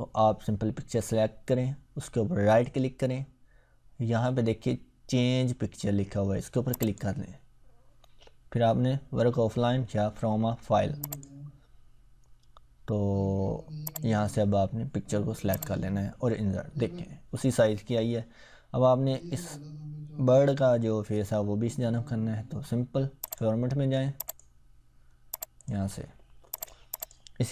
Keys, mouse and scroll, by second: 2.6 right click, 6.7 click, 11.0 click, 13.8 click, 23.2 click.